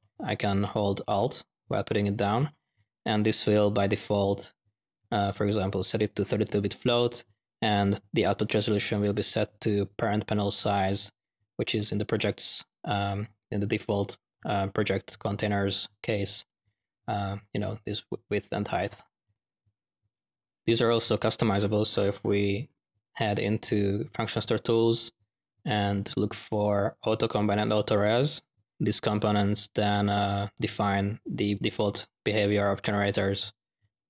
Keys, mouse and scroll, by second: 0.0-0.6 typing, 0.1 drag, 1.2 alt+click, 3.9 click, 15.6-16.0 drag, 16.3 click, 20.1 click, 20.1-20.8 typing, 24.2 click, 27.2-27.7 drag, 28.0-28.5 drag, 28.7 click, 33.9-34.0 drag.